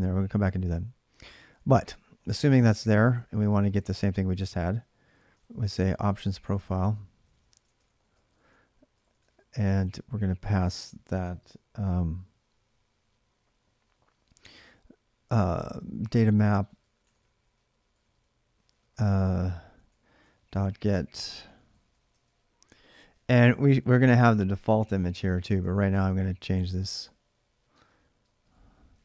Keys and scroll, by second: 2.0-3.8 typing, 5.2-10.5 typing, 15.5-22.0 typing, 21.9 ctrl+[, 23.2-29.0 typing.